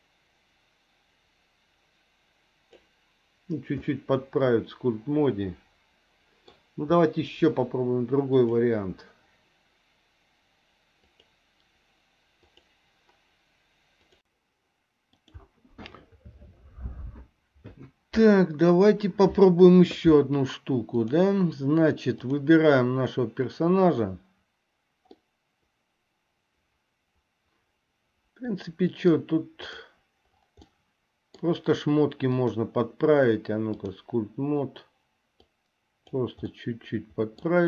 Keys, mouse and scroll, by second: 3.8-6.5 middle drag, 8.3 click, 21.0 click, 22.3 click, 25.3-29.5 middle drag, 29.9 click, 31.0 middle click, 32.5-34.2 drag, 35.6 click, 36.7-37.6 middle drag.